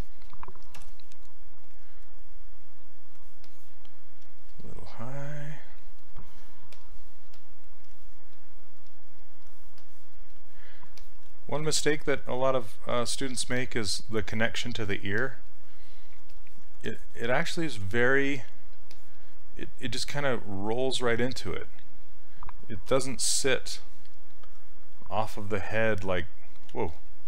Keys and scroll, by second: 0.8 w, 7.3 s, 11.8 s, 18.4 s, 26.8 ctrl+z.